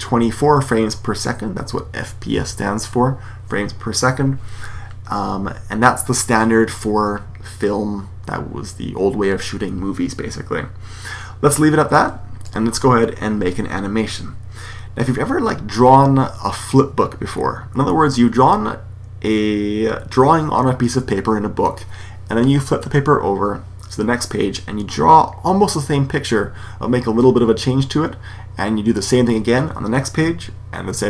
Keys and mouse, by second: 11.9-13.6 drag.